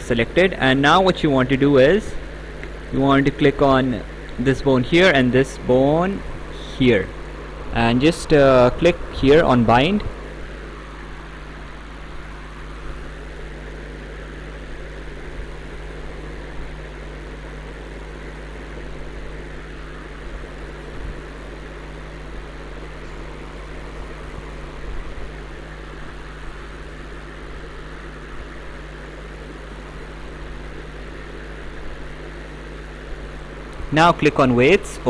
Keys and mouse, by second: 4.4 click, 6.8 click, 9.5 click.